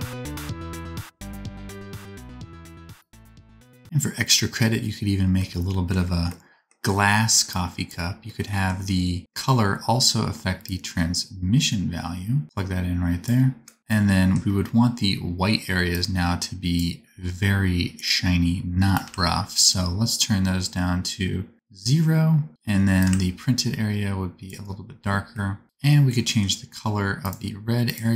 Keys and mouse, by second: 7.6-27.9 drag, 27.9-28.1 middle drag.